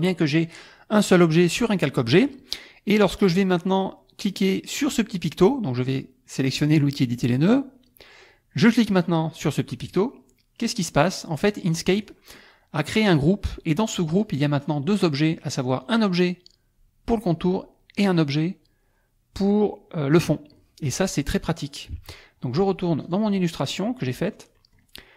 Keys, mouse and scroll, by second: 4.2 click, 9.9 click, 11.3 middle click, 11.8 middle click, 14.1 click, 15.8 click, 18.0 click, 21.4 click, 22.0 alt+Tab, 23.0 alt+click, 23.7 alt+middle click, 24.6 middle click.